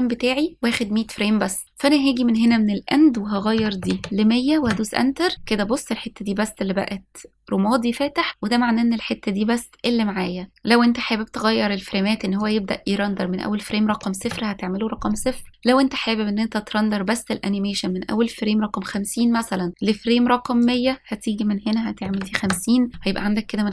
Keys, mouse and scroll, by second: 0.0-1.6 drag, 3.2-5.3 drag, 4.8 KP_0, 13.2-15.0 drag, 18.1-19.7 drag, 21.4-23.0 drag.